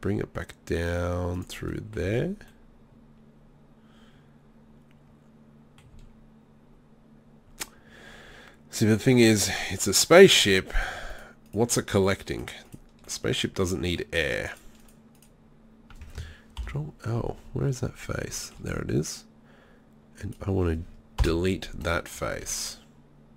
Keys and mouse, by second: 1.4-2.5 drag, 2.0 z, 2.5 middle click, 6.0 z, 9.8-13.0 middle drag, 13.7-15.8 middle drag, 16.6 ctrl+l, 20.2 right click, 21.2 Delete, 22.3 z.